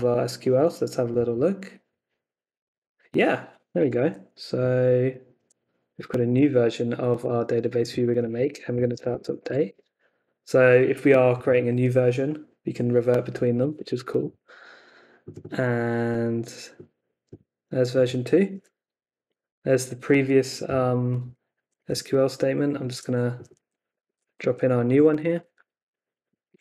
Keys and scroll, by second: 6.0 super+c, 6.3 super+Tab, 8.0 super+t, 8.4-9.6 typing, 9.6 Return, 13.7 n, 18.5 t, 21.9 super+Tab, 23.6 super+a, 24.0 super+c, 24.4 super+Tab, 25.1 super+a, 25.5 super+v, 26.5 super+s.